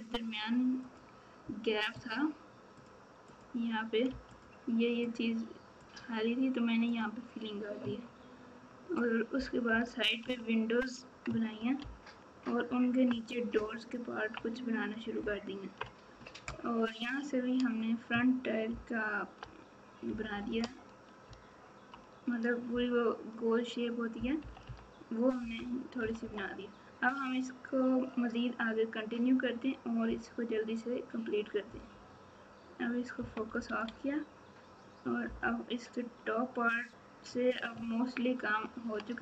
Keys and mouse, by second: 0.9-2.8 drag, 5.8 click, 9.7 KP_4, 10.2 KP_3, 12.3 ctrl+KP_4, 13.5 ctrl+KP_2, 14.0 ctrl+KP_2, 20.1 KP_Subtract, 20.3 KP_Subtract, 20.5 KP_Subtract, 21.2 ctrl+KP_6, 22.7 KP_8, 24.1 KP_4, 24.4 KP_4, 24.6 KP_4, 26.0 KP_Subtract, 31.7 KP_Divide, 33.2 KP_Subtract, 33.4 KP_Subtract, 35.2 KP_7, 37.7 ctrl+KP_8.